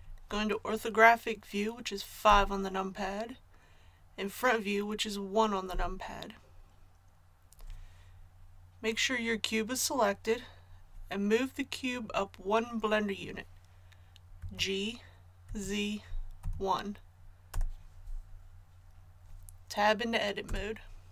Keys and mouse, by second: 2.2 KP_5, 5.7 KP_1, 14.4 g, 20.5 Tab.